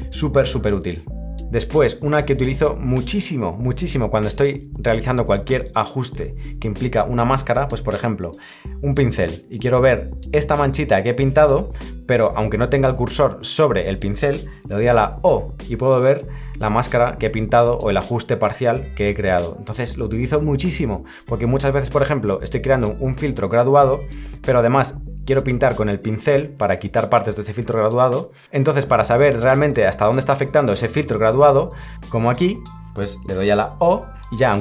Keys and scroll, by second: 0.5 l.